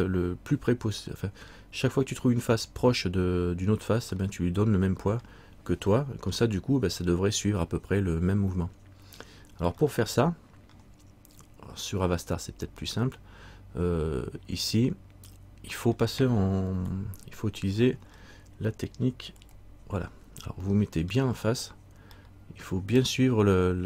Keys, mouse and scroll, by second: 1.2 middle click, 4.4 middle click, 6.2 middle click, 10.0 middle click, 16.9 KP_1, 17.9-18.3 scroll down 1, 19.6 KP_3, 20.5-20.8 scroll up 1, 21.3 scroll down 1, 22.4 shift+middle click.